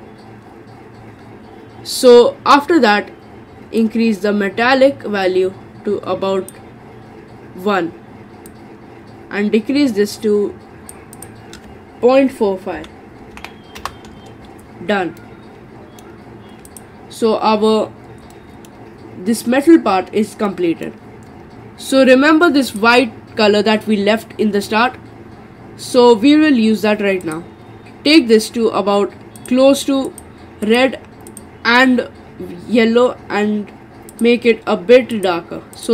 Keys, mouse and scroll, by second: 2.2-3.8 scroll down 4, 3.8-6.8 drag, 8.5-14.3 drag, 15.2-16.7 middle drag, 16.7 click, 18.3-21.5 middle drag, 21.5-22.7 scroll up 3, 22.7 click, 27.2 click.